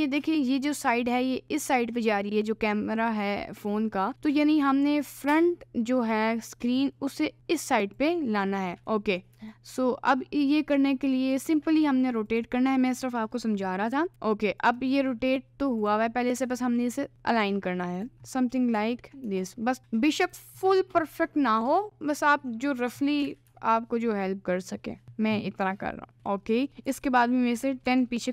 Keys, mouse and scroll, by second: 4.1-7.3 middle drag, 7.4 click, 8.0 click, 8.8 ctrl+z, 9.5-11.5 ctrl+drag, 12.3 click, 13.3 middle click, 14.1 r, 14.9 middle click, 15.9 click, 16.5 g, 18.7 g, 21.1 g, 23.3 g, 26.1 middle click, 26.9 g.